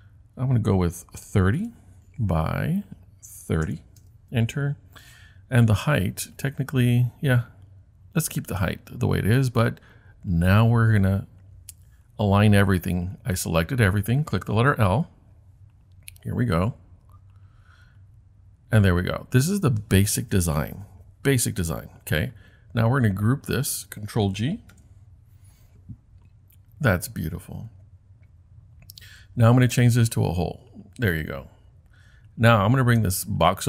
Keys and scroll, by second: 0.8-1.7 typing, 3.3-4.2 typing, 24.7 super+g.